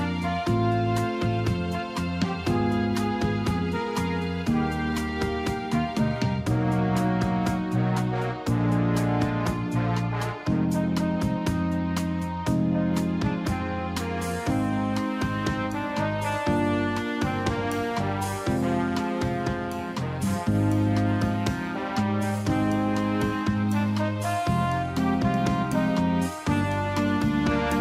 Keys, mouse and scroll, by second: 1.0 click, 2.3 shift+click, 3.1 click, 4.2 click, 5.1 click, 6.5 click, 7.4 click, 8.4 click, 9.2 shift+click, 10.4 click, 11.3 click, 12.4 click, 13.2 shift+click, 14.1 shift+click, 14.9 shift+click, 16.0 click, 23.8 click.